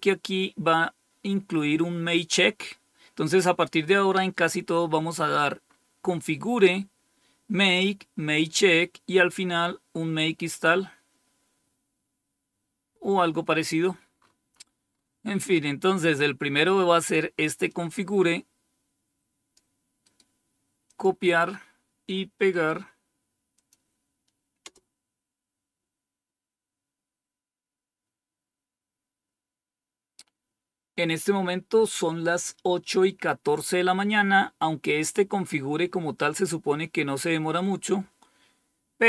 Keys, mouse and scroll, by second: 4.7-5.5 scroll up 1, 5.6 scroll up 2, 6.7-7.9 scroll down 3, 7.9-8.8 scroll down 1, 8.8-9.8 scroll down 2, 9.8-12.0 scroll down 1, 12.0-13.3 scroll down 1, 13.3-14.1 scroll down 1, 14.1-15.4 scroll up 4, 16.1 scroll up 1, 17.6-19.5 drag, 20.8 click, 23.4 click, 24.5 Return.